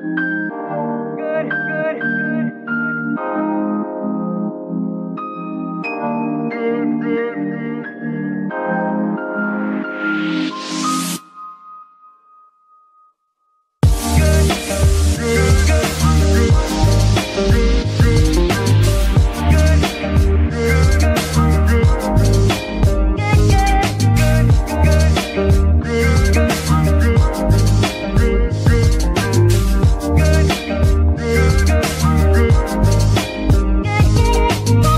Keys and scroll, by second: 0.4 b, 0.5 a, 0.8 c, 1.1 k, 1.7 Return, 5.2 F2, 7.2 shift+-, 7.6 f, 7.6 r, 8.2 Return, 11.6 F2, 13.1 Right, 13.6 shift+-, 14.0 shift+f, 14.7 Return, 17.5 F2, 18.4 BackSpace, 18.6 BackSpace, 18.7 BackSpace, 18.9 BackSpace, 20.4 shift+-, 20.9 b, 21.2 k, 21.6 Return, 24.9 F2, 26.0 BackSpace, 26.1 BackSpace, 26.2 BackSpace, 26.4 BackSpace, 27.8 Left, 28.3-28.8 typing, 29.4 Return, 33.5 z.